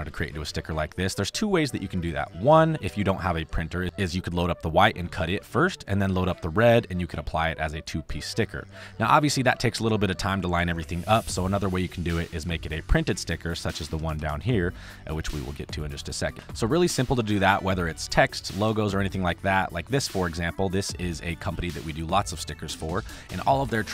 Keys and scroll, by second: 9.6 ctrl+z, 12.9 space, 15.9 space, 16.3 ctrl+v, 20.0 space.